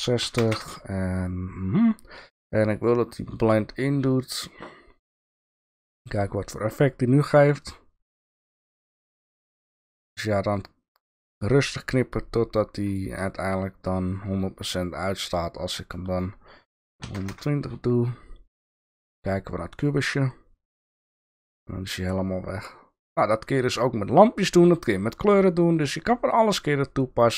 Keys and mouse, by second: 3.0-4.2 drag, 7.6 click, 12.9 click, 16.3-17.9 drag, 26.3 click.